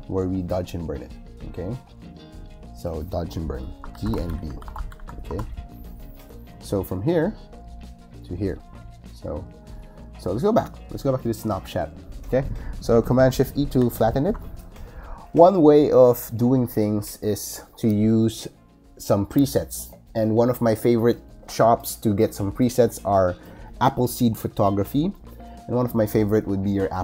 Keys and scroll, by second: 3.6-5.3 typing, 6.0 Return, 13.6 shift+super+e.